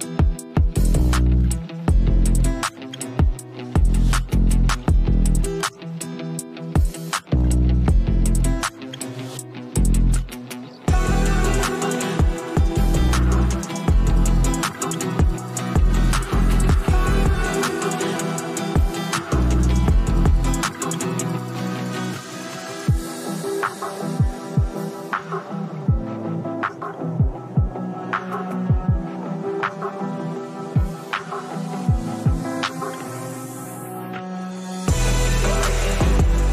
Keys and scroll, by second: 30.7-33.2 typing.